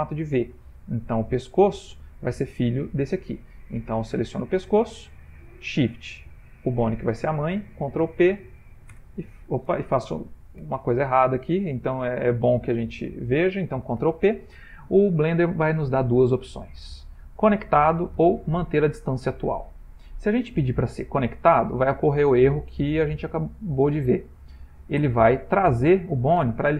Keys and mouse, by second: 1.2 click, 6.2 shift+click, 8.0 ctrl+p, 10.2 ctrl+z, 14.0 ctrl+p.